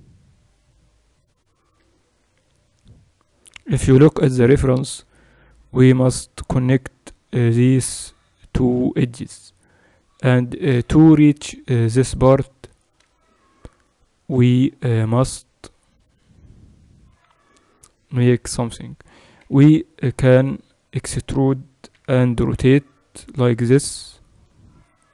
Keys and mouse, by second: 13.2-22.0 middle drag, 19.4 b, 22.0 e.